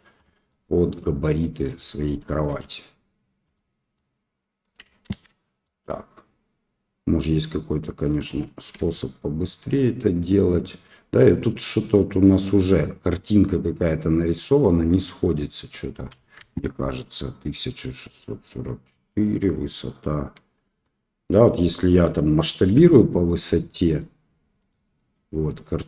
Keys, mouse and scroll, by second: 0.5-1.6 right drag, 2.5 s, 3.9 click, 5.1 ctrl+z, 5.6-7.6 right drag, 7.6 click, 8.7 s, 15.2 click, 16.4 ctrl+z, 22.7 s, 24.6 click, 25.1 s.